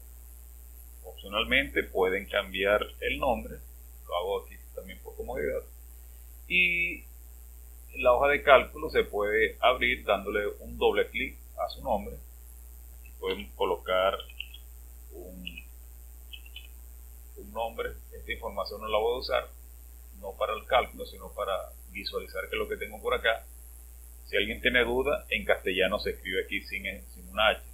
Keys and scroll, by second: 2.0-3.4 typing, 13.3-16.6 typing.